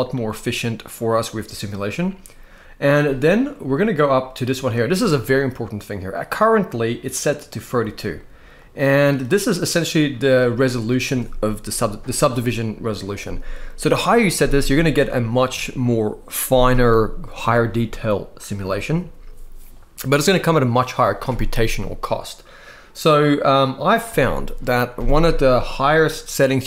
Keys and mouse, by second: 8.4 click.